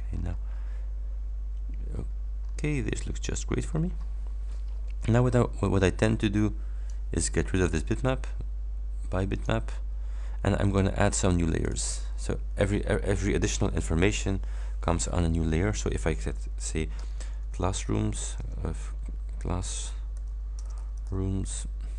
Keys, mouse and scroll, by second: 0.2 scroll down 2, 1.9-2.2 scroll down 2, 2.5-2.8 scroll down 2, 3.7-4.1 scroll up 2, 4.3-4.7 scroll up 1, 6.3 click, 7.7 click, 9.4 click, 11.7 click, 17.0-18.5 typing, 19.6-21.6 typing.